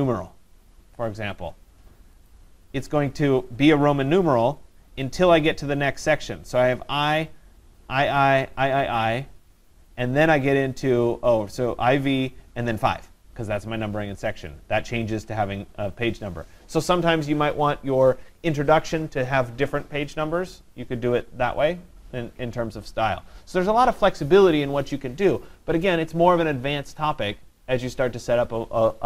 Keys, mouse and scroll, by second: 0.0 click, 2.3 click.